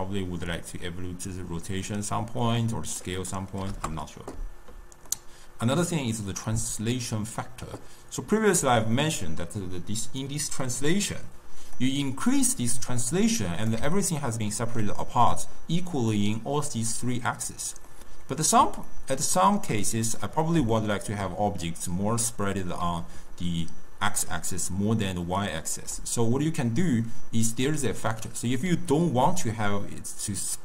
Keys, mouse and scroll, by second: 5.0-8.0 middle drag, 11.7-14.1 drag, 14.1-17.2 ctrl+middle drag, 17.8-19.7 middle drag, 19.7 scroll down 2, 19.8-22.8 middle drag, 22.8-25.8 typing, 23.4-24.2 drag, 25.3 click, 29.4-30.6 middle drag.